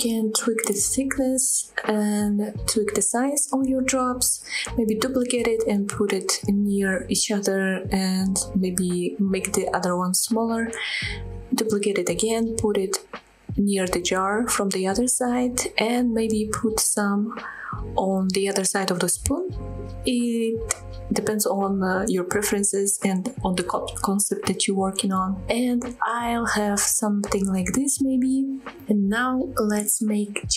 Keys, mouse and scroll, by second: 0.0-0.4 shift+scroll down 3, 0.5 middle click, 0.6 scroll down 2, 0.7 middle click, 0.8 s, 1.1 click, 1.2 middle drag, 1.4 g, 1.6 z, 1.9 shift+click, 2.1 shift+s, 2.6 middle click, 2.7 scroll up 1, 2.8-3.3 right drag, 3.3 scroll up 1, 3.3 middle click, 3.8 middle click, 4.1 scroll down 1, 4.1 middle drag, 4.5-6.6 typing, 4.6 scroll up 1, 4.7 scroll down 2, 4.8 shift+middle click, 6.0 click, 6.9 click, 7.0 scroll down 2, 7.1-7.9 middle drag, 7.9 drag, 8.0 middle click, 8.4 KP_7, 8.7 shift+d, 9.2 s, 9.5 click, 9.6 g, 9.9 click, 10.0-10.4 middle drag, 10.4-10.8 scroll up 2, 10.5-10.9 middle drag, 10.9 g, 11.1 z, 11.5 shift+click, 11.6 middle drag, 11.8 Tab, 11.9 scroll up 2, 12.0 shift+middle click, 12.6 click, 13.4 scroll down 1, 13.4 middle click, 13.5 Tab, 13.6 click, 13.7 middle click, 14.1 KP_7, 14.4 g, 15.1 drag, 15.2-15.6 middle drag, 15.6-16.2 scroll down 3, 15.7 middle click, 15.8 click, 16.2 middle click, 16.4 click, 16.5 scroll up 2, 16.5 middle drag, 16.5 scroll down 1, 16.9 scroll up 3, 17.0 shift+middle click, 17.8 shift+click, 18.5 g, 18.6 z, 19.0 click, 19.3 shift+click, 19.9 scroll down 1, 20.0 middle drag, 20.2 middle click, 20.5 F5, 20.7 middle click, 21.2 shift+middle drag, 21.7 scroll down 1, 21.9 KP_7, 22.0 scroll up 1, 22.2 shift+middle click, 22.3 scroll down 2, 22.5 shift+d, 23.2 click, 23.2 scroll down 2, 23.3 middle click, 23.5 click, 23.5 middle click, 23.9 scroll down 1, 24.1 shift+middle click, 24.4 middle click, 24.6 click, 24.8 click, 24.9 click, 26.0 ctrl+s, 27.5 scroll down 1, 27.9 shift+middle drag, 28.2 middle click, 28.6 shift+middle drag, 29.6 shift+a.